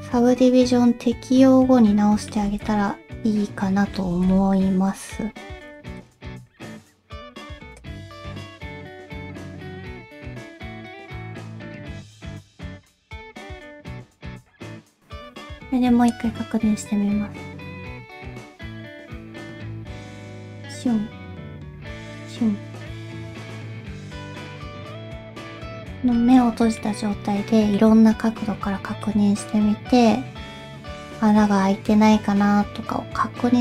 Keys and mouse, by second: 2.5 alt+z, 2.7-4.0 middle drag, 4.1 alt+z, 4.3 middle click, 6.0 click, 6.3 alt+z, 7.2 g, 8.2 alt+z, 8.6 click, 8.9 alt+z, 9.2 g, 10.1 shift+click, 10.5 g, 11.1 click, 11.2 middle click, 12.8 click, 13.0 alt+z, 13.3 alt+z, 13.7 g, 14.3 middle click, 14.8 shift+middle click, 16.2-24.8 drag, 25.3 middle click, 26.2 shift+middle click, 26.8 middle click, 28.6 KP_5, 29.0-33.6 middle drag.